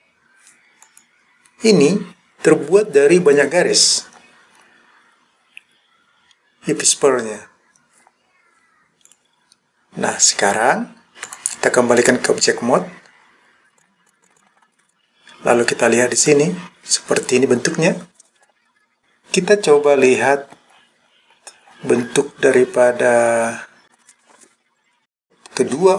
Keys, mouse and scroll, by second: 0.9 click, 4.8-5.6 scroll up 1, 5.6-6.6 scroll up 1, 9.1 click, 11.3 click, 13.8 click, 14.1 click, 14.4 click, 14.5 scroll down 3, 14.7-15.0 scroll up 2, 16.3 click, 17.6-18.4 scroll up 2, 20.8-21.4 scroll down 1, 21.4-21.7 scroll down 1, 22.0-22.5 scroll down 2, 22.5-23.2 scroll up 2, 23.2-23.9 scroll down 2, 23.9 scroll up 1.